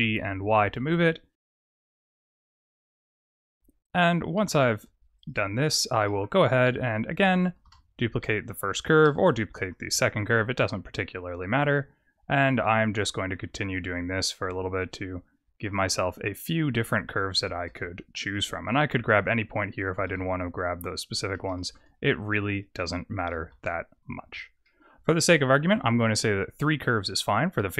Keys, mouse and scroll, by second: 0.4 click, 0.7 y, 1.3 ctrl+z, 1.3 scroll up 4, 1.5 g, 3.7 click, 4.3 g, 5.3 Tab, 5.6-6.6 scroll down 4, 5.9 middle click, 6.6 click, 7.6 shift+d, 9.8 Tab, 10.7 click, 13.3 g, 16.9 click, 17.4 g, 19.1 click, 19.9 g, 21.4 shift+middle click, 22.4 click, 23.2 g, 24.1 Tab, 24.6 middle click.